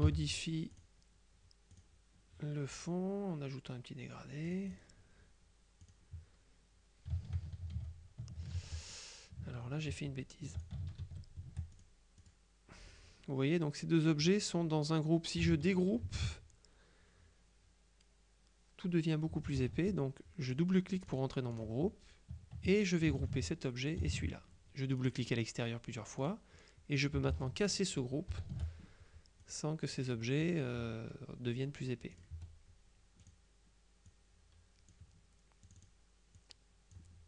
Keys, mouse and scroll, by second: 0.1 g, 0.8 click, 1.8 click, 4.5 click, 5.9 click, 7.6 ctrl+shift+g, 8.7 ctrl+z, 8.9 ctrl+click, 10.0 z, 10.6 ctrl+click, 11.1 ctrl+shift+z, 11.8 shift+click, 16.1 ctrl+shift+g, 19.6 ctrl+z, 20.5 click, 21.2 click, 23.3 ctrl+g, 23.9 ctrl+click, 24.2 ctrl+g, 25.0 click, 26.3 click, 28.4 ctrl+shift+g, 29.5 click, 32.2 click, 32.4 F2, 33.3 click, 34.2 click, 35.7 click.